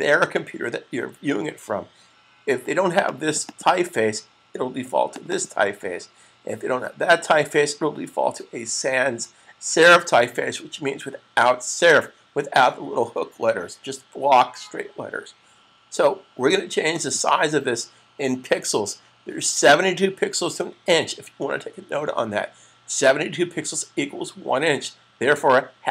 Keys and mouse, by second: 2.7 click, 3.1 double click, 4.7 click, 5.1 double click, 16.7 click.